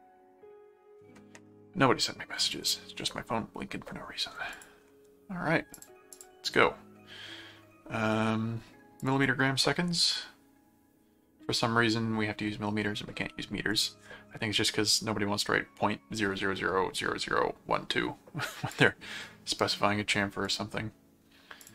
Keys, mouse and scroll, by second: 2.5 click, 4.5 click, 5.7 click, 9.0 click, 13.7 click, 18.7 click, 20.4 click, 21.6 click.